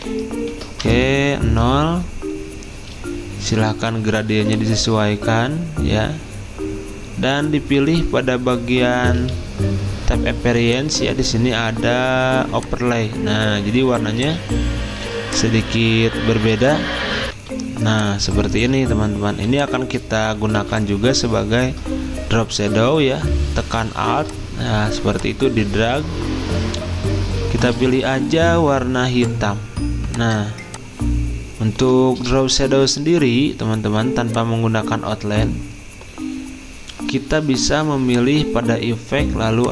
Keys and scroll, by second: 0.5 ctrl+a, 0.6-1.3 typing, 3.3-4.1 typing, 17.3 F10, 19.4 d, 32.2 Escape, 33.4 /.